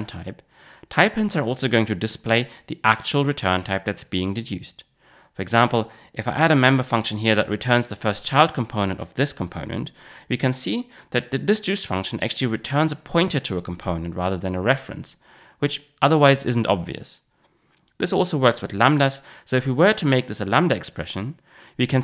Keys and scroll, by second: 9.8 Return, 18.7 super+x, 20.3 super+v.